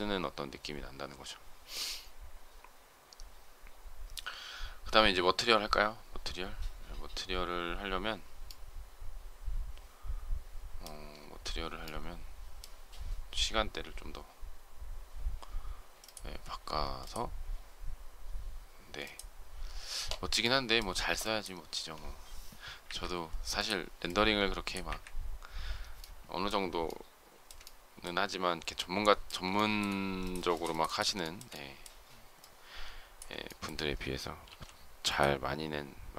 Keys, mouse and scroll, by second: 22.7 Delete, 24.7 Delete, 26.7 shift+middle click, 29.4 shift+middle click, 31.0 shift+middle click, 33.3 shift+scroll down 1, 33.3 shift+middle click, 34.3 m.